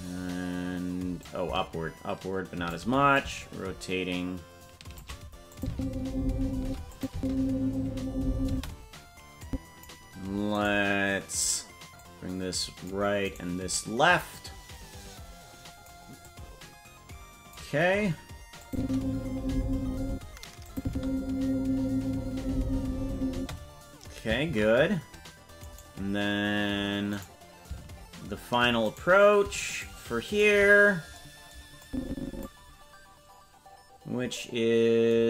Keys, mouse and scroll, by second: 1.2-2.7 shift+drag, 3.1-5.0 shift+drag, 5.5 click, 5.6 space, 6.6 space, 6.9 click, 7.1 space, 8.5 space, 9.4 click, 10.6 right click, 12.0 click, 13.3 right click, 14.3-15.9 drag, 16.2-17.5 drag, 18.6 click, 18.8 space, 20.0 space, 20.6 click, 20.8 space, 23.3 space, 26.6 ctrl+s, 26.8 right click, 27.2 right click, 29.8 shift+right click, 30.4 shift+right click, 31.8 click.